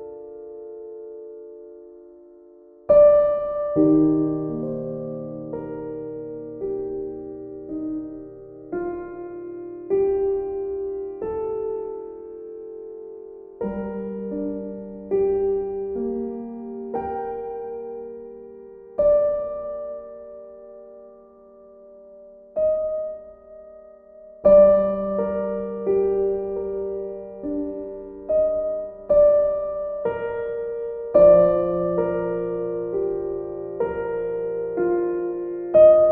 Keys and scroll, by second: 8.9 b.